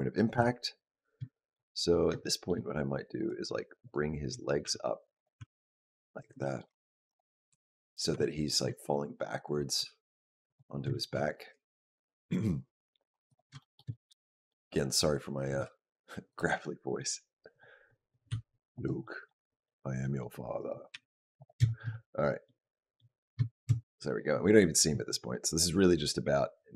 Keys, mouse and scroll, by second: 0.2 KP_Decimal, 1.2 shift+middle click, 1.6 middle click, 1.6-1.9 scroll down 1, 2.1 shift+middle click, 3.0 click, 3.6 click, 4.5 g, 5.2 r, 6.2 shift+middle click, 6.9 click, 7.3 g, 8.0 r, 9.2 click, 9.6 g, 11.2 click, 11.4 g, 13.4 shift+middle click, 13.7 middle click, 14.8 click, 15.4 g, 16.4 middle click, 17.3 click, 17.7 middle click, 18.1 g, 18.9 middle click, 19.3 middle click, 19.8 middle click, 20.4 click, 20.8 g, 21.5 shift+middle click, 21.6 shift+scroll down 1, 21.8 middle click, 22.5 middle click, 23.3 shift+middle click, 23.5-24.0 shift+scroll up 1, 25.8 click.